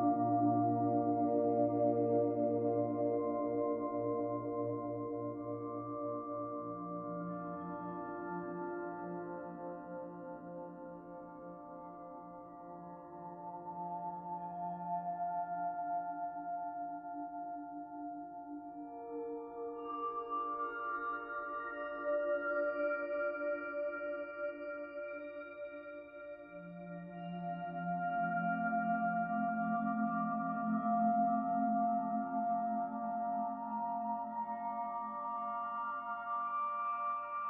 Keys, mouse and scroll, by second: 0.2 click, 2.4 click, 2.9 click, 5.9 right click, 9.5 click, 12.8 middle click, 14.5-15.2 scroll down 1, 15.2 click, 16.0 middle click, 17.9 click, 20.7 click, 25.3 click, 28.0 click, 30.9 middle click, 35.1 click.